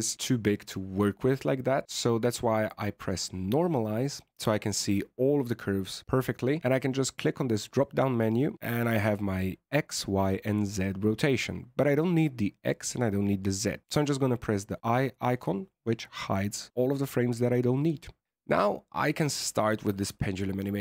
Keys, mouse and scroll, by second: 0.0-2.9 scroll down 17, 2.9 click, 3.4-4.7 scroll up 25, 4.7-5.9 scroll up 5, 5.9-7.6 scroll up 2, 7.6 click, 13.8 click, 14.8 click, 18.6-19.8 scroll up 2, 20.0 alt+a.